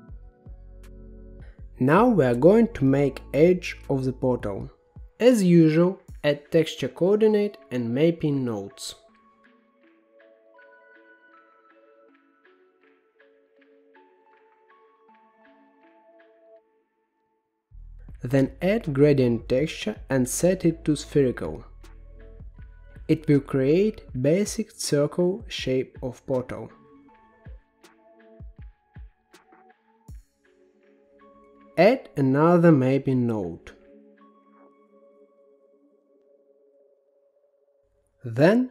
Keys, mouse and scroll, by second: 1.8-2.8 middle drag, 2.8-4.5 scroll up 7, 4.5 shift+a, 8.8 shift+a, 13.4-17.6 drag, 17.6 g, 18.5 click, 19.0 shift+a, 23.0-31.0 drag, 32.0 click, 32.7 shift+d, 34.5-36.1 drag, 36.1-37.3 middle drag, 37.3-37.6 scroll up 1, 37.6 middle click, 37.9 shift+a.